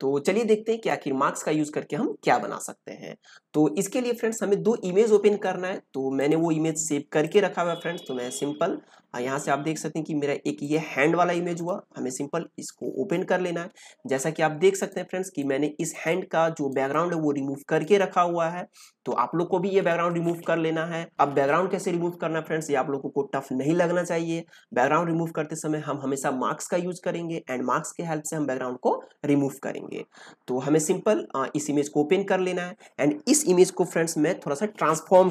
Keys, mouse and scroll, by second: 6.1 click, 6.1 p, 8.8-9.7 scroll down 1, 9.7-10.5 scroll up 1, 10.5 click, 14.7 click, 15.0 ctrl+space, 15.3 ctrl+click, 15.5 ctrl+space, 16.0 ctrl+click, 16.5 space, 16.8-35.3 ctrl+drag.